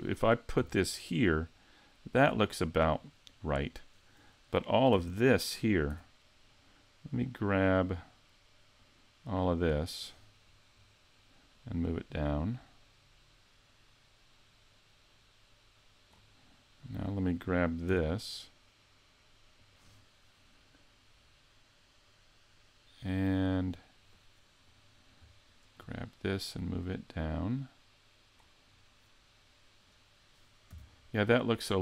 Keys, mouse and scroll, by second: 0.6 g, 3.0 click, 4.9 a, 5.9 b, 11.5 click, 16.8 right click, 17.9 g, 19.7 click, 24.7 right click, 25.5 shift+right click, 26.4 click, 29.8 right click, 30.7 g.